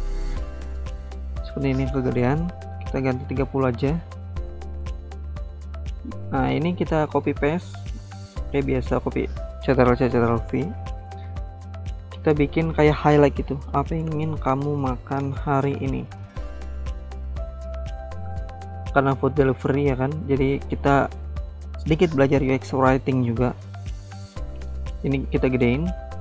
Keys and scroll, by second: 1.8-2.7 typing, 2.9 Return, 7.0 ctrl+c, 7.2 ctrl+v, 7.3 typing, 10.9-18.0 typing.